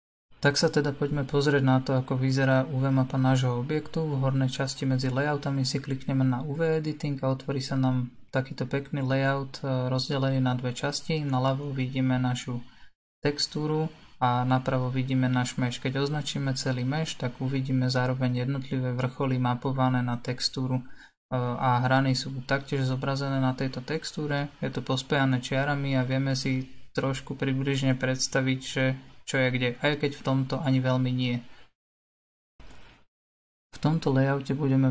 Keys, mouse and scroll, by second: 2.7 click, 4.3 scroll up 6, 5.0-8.7 middle drag, 8.7 a.